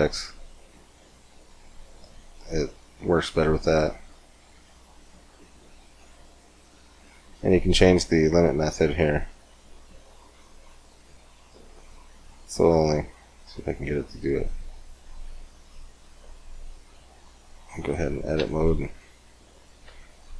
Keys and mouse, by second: 3.1 middle click, 3.8-5.3 middle drag, 5.3-11.8 drag, 12.7-14.4 middle drag, 16.0-17.4 middle drag, 17.4-18.5 drag, 17.9 Tab, 18.5 KP_7, 19.9 KP_5.